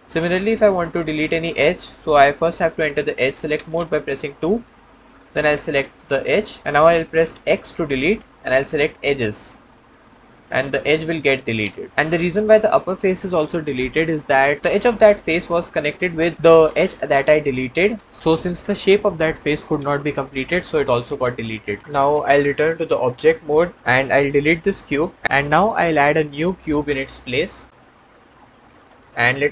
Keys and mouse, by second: 0.0 w, 0.3-1.7 middle drag, 4.3 2, 5.8 middle click, 7.4 x, 9.9-11.9 middle drag, 14.3 middle click, 14.7-16.2 middle drag, 22.9 Tab, 24.4 x, 26.1 shift+a.